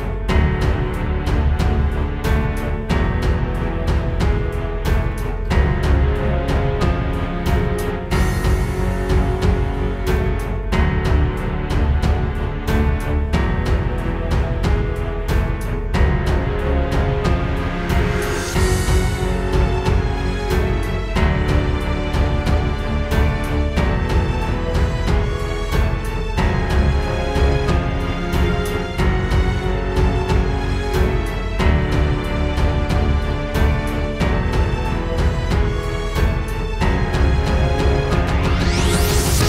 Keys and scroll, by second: 22.4 space, 23.3 super+z, 29.3 super+z, 31.6 space, 32.0 super+", 32.2 space, 32.8 super+space, 33.0 super+space, 33.6 super+space, 38.6 space, 38.8 space.